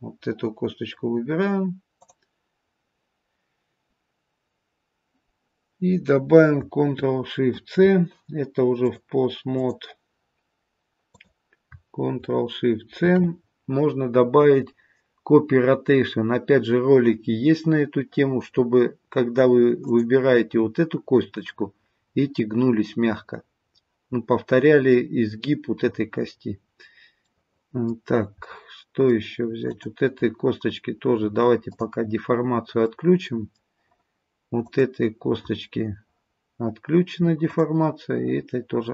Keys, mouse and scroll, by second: 1.9 click, 7.4 ctrl+shift+c, 8.8 click, 11.1 click, 12.9 ctrl+shift+c, 19.8 click, 26.5-27.3 scroll down 1, 27.3 middle click, 27.3-28.4 scroll down 2, 28.4 middle click, 29.6 click, 31.7 click, 32.4-32.8 scroll down 3, 32.8 middle click, 34.7 click, 37.4 click.